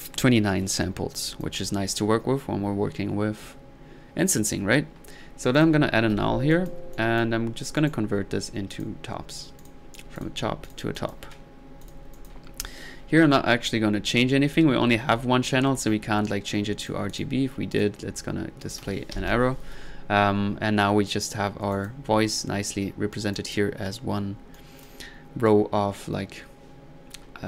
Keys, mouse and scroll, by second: 0.5 middle click, 1.4-1.7 drag, 5.6 click, 6.1 alt+n, 6.6-6.9 alt+drag, 7.0-7.4 alt+drag, 7.8-8.2 alt+right drag, 8.7 click, 9.6 click, 10.2 click, 10.7-11.3 drag, 11.5 click, 13.8 middle click, 16.8 click, 17.1 drag, 17.7 click, 18.6 ctrl+click, 19.1 ctrl+z, 19.5 ctrl+middle click, 19.8 ctrl+middle click, 21.7-22.1 drag, 23.4 click.